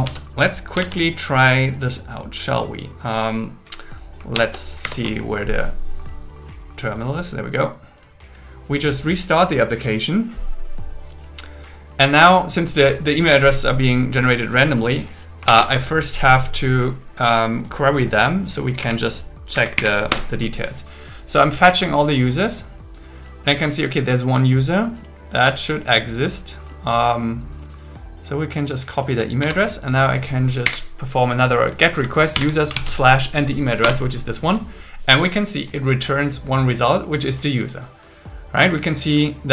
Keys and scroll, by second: 0.0 super+s, 0.8 super+1, 4.4 ctrl+Tab, 4.8 ctrl+Tab, 5.0 ctrl+4, 15.6 ctrl+t, 18.8 Up, 19.5 Down, 19.8 Up, 20.1 Return, 29.4 super+c, 30.6 Up, 32.3 shift+7, 32.7 super+v, 33.8 Return.